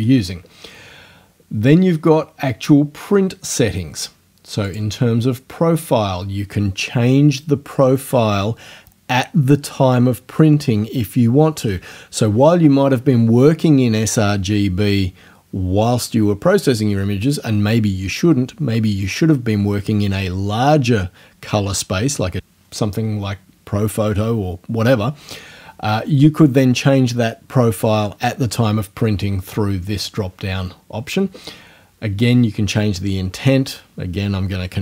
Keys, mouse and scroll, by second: 4.7 click.